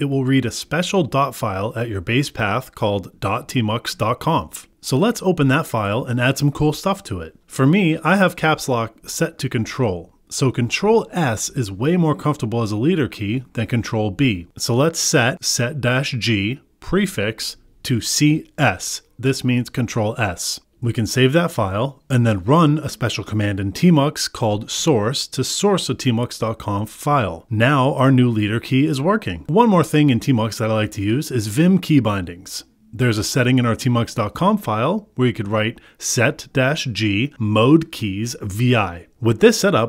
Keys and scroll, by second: 5.9 Right, 6.3 Return, 8.1 super+v, 8.6 Escape, 10.5 Escape, 21.7 Return, 22.4 Escape, 23.7 ctrl+b, 28.9 Return, 30.5 Right, 31.0 ctrl+s, 31.1 Up, 31.3 ctrl+s, 31.4 Left, 36.2 ctrl+s.